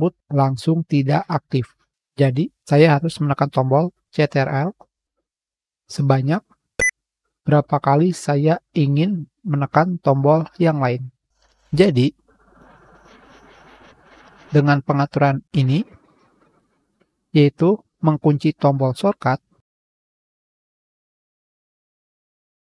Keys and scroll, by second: 12.0 Page_Up.